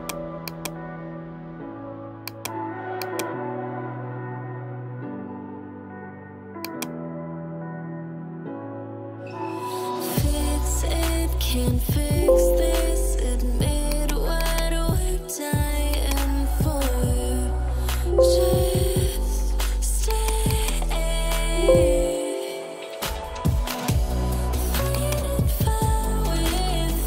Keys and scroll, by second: 12.2 alt+BackSpace, 18.0 alt+BackSpace, 21.4 alt+BackSpace.